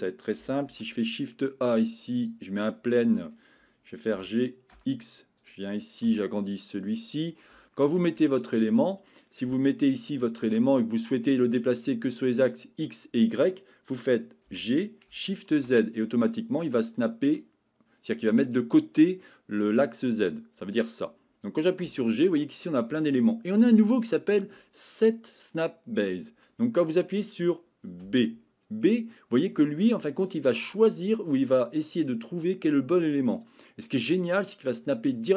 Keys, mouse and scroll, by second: 0.6 shift+a, 3.1 middle click, 4.1 g, 4.7 x, 5.4 click, 6.0 s, 6.9 click, 7.6-8.0 shift+middle drag, 9.4 g, 10.4 click, 10.9 middle click, 14.4 g, 15.5 shift+z, 20.2 Escape, 21.8 g, 28.0 b.